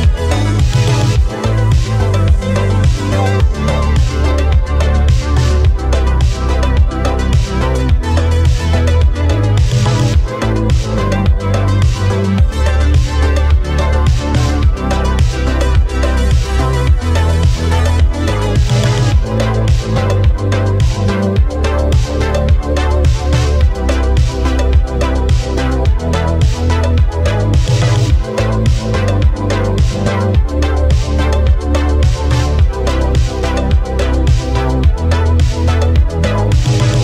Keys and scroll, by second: 15.9 x, 17.4 x, 18.9 x, 22.8 x, 23.7 x, 36.8 x.